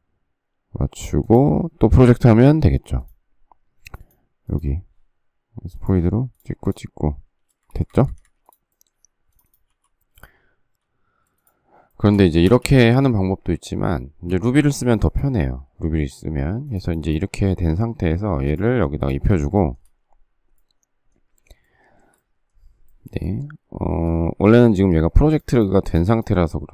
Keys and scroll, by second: 1.8 space, 7.4 space, 7.6 Escape, 7.9 Escape, 8.0 Escape, 9.6 m, 12.4 shift+space, 23.9 shift+space, 24.4 Escape, 24.8 Escape, 25.0 Escape.